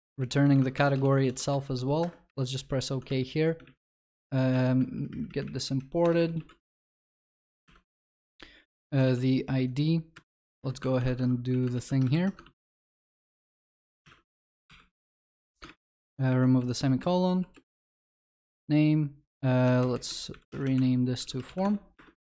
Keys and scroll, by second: 0.7 ctrl+BackSpace, 3.6 shift+F2, 4.0 alt+Return, 7.6 ctrl+y, 13.2 ctrl+v, 15.0 ctrl+y.